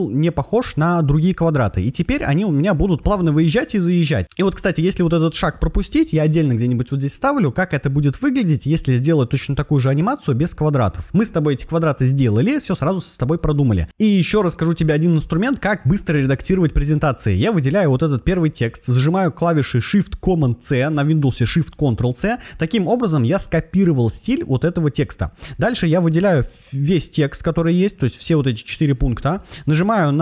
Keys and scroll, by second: 20.6 shift+super+c.